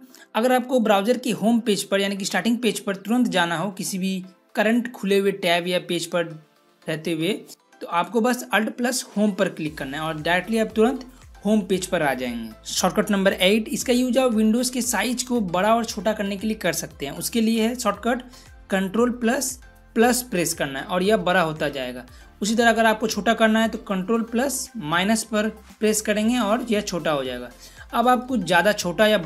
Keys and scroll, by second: 8.9 alt+Home, 20.0 ctrl++, 24.9 ctrl+-.